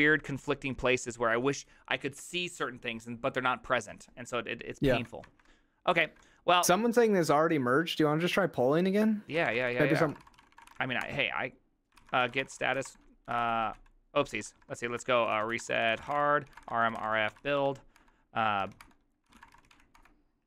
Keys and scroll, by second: 5.4 alt++, 6.1 alt+{, 9.4 ctrl+a, 9.5 ctrl+a, 9.7 ctrl+c, 9.8 ctrl+c, 9.8-20.4 typing.